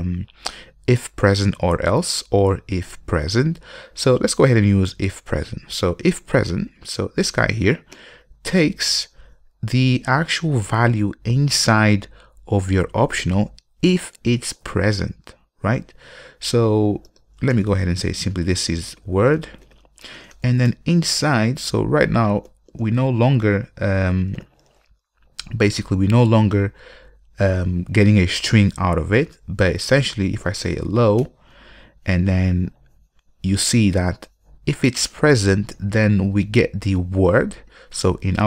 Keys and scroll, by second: 1.2 ctrl+space, 8.2 ctrl+space, 24.2 super+y, 31.4 Return.